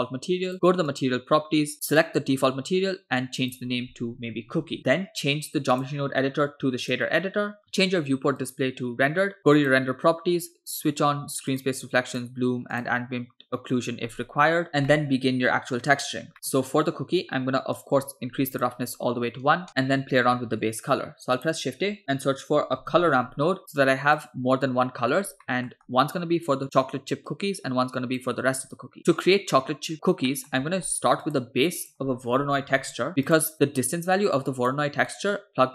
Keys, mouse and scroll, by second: 0.9 click, 1.7 click, 3.4-4.8 drag, 4.6 o, 5.8-7.0 drag, 8.7 click, 9.6 click, 11.7 click, 12.4 click, 12.8 click, 14.7 scroll down 4, 14.9-15.8 middle drag, 16.3 middle click, 16.7-17.8 scroll up 2, 17.8 click, 19.7 middle click, 20.5 shift+a, 25.5 middle click, 25.9-26.5 scroll up 2, 26.5-26.8 drag, 27.3-28.2 drag, 29.0 middle click, 30.3 middle click, 30.7 shift+a, 33.9-34.8 drag, 35.1 middle click.